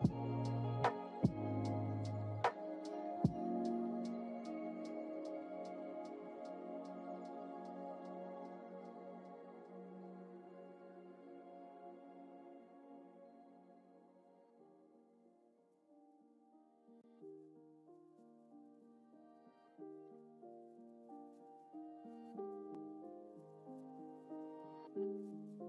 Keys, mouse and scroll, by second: 3.2 click, 4.0-10.6 drag, 11.8 click, 12.6-14.2 drag, 15.6 click, 16.8-25.6 drag.